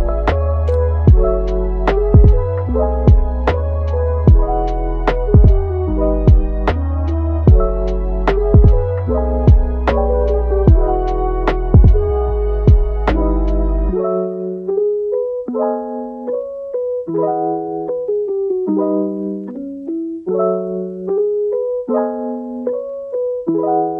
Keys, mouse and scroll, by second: 0.9 KP_1, 1.3 scroll up 4, 1.8-3.3 ctrl+middle drag, 3.3 click, 3.6 g, 7.2 click, 7.5 g, 8.1 click, 8.4 g, 14.4-15.0 scroll down 7, 15.0-15.5 scroll up 1, 15.5 click, 15.9 click, 16.2 g, 17.0 middle click, 17.5 Tab, 17.9-18.2 scroll down 3, 18.2 middle click, 19.0 click, 19.4 s, 21.3-21.6 scroll down 1, 21.6-22.0 shift+middle drag, 22.0-22.4 scroll up 4, 22.4-22.9 shift+middle drag, 22.9-23.2 scroll up 1, 23.2-23.9 middle drag.